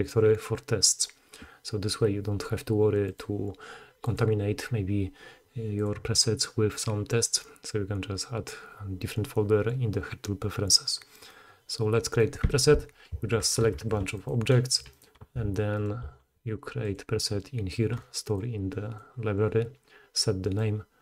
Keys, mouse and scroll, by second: 5.8-6.8 middle drag, 6.8-14.3 drag, 13.8 shift+d, 14.3-14.9 middle drag, 14.9 shift+click, 15.0 shift+middle click, 15.8 shift+click, 15.8-16.8 shift+middle drag, 16.8 click, 17.0-18.4 middle drag, 18.4-21.0 drag.